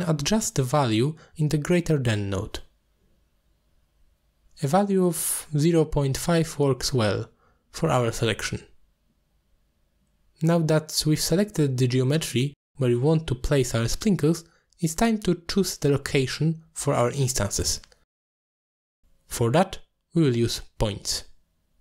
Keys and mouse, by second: 1.4-2.1 drag, 3.8-4.6 middle drag, 6.0-8.0 shift+drag, 8.7-10.9 drag, 10.9-12.8 middle drag, 13.8 alt+shift+click, 14.3 alt+shift+click, 15.0 alt+shift+click, 16.1-17.7 middle drag, 21.4 middle click.